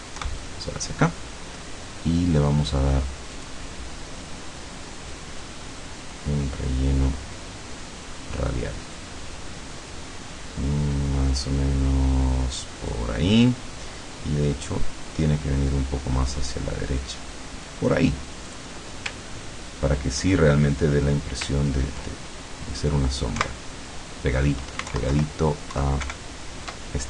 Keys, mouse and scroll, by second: 0.2 Right, 3.4 click, 5.4-13.1 drag, 15.8-17.9 drag, 18.5 click, 19.3 ctrl+scroll down 2, 21.6 ctrl+scroll up 2, 23.4 Right, 24.9 alt+Left, 26.0 alt+Right.